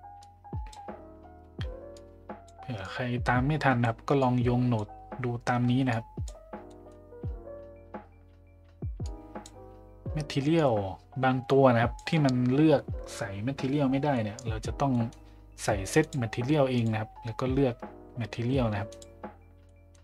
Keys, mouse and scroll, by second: 0.2 click, 2.0-2.5 drag, 2.8-3.9 drag, 4.2 click, 5.9-6.2 drag, 6.7 middle click, 9.0 click, 10.5-12.0 drag, 14.1-14.5 middle drag, 14.9 middle click, 16.1 drag, 16.7-19.1 drag, 19.7 middle click.